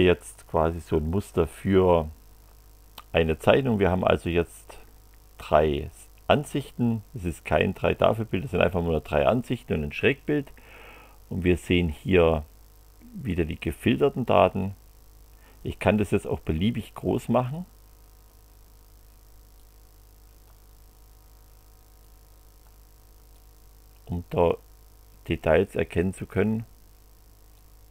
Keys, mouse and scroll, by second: 14.6 click, 16.6 click, 17.5 click, 19.6 click, 22.0 click, 23.3-25.4 drag, 26.3 click, 27.5 click.